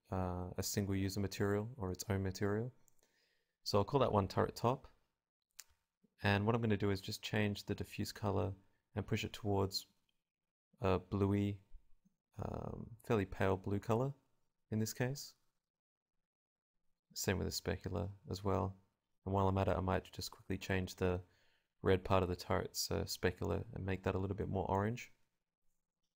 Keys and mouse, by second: 1.2-3.2 middle drag, 3.2-4.9 drag, 5.3-6.8 drag, 8.4 click, 14.4 click, 18.1 middle click, 18.2-19.9 drag, 21.4-22.4 right drag, 22.4-24.9 drag, 22.6-24.2 right drag, 25.4-26.1 drag.